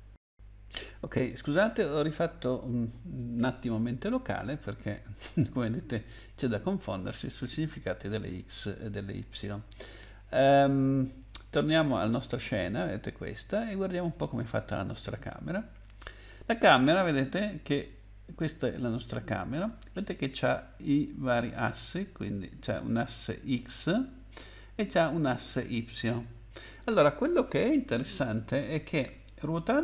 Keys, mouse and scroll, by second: 11.6 click, 16.2 click.